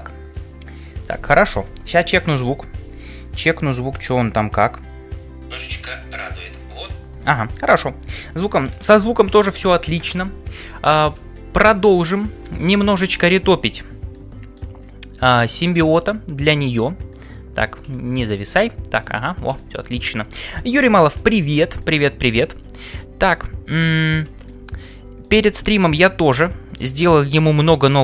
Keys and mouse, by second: 24.7-25.9 drag.